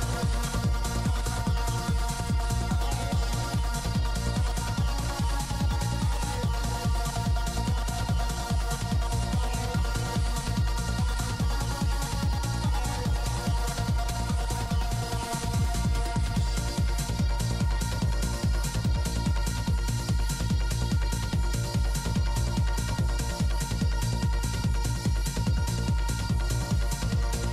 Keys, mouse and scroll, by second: 1.0 ctrl+z, 1.5 ctrl+shift+z, 2.4 click, 3.8 f, 4.3 f, 4.7 f, 5.0 click, 10.2 i, 10.2 f, 10.6 f, 10.8-14.8 drag, 13.2 middle click, 13.6 right click, 14.5-16.6 middle drag, 17.6 g, 17.6 f, 18.0-21.0 drag, 19.6 f, 21.2 f, 21.4 click, 21.4 middle click, 23.7 p, 23.7 f, 24.6 click, 24.6 shift+c, 25.5 shift+f, 26.5 p, 26.5 f, 27.1 shift+f.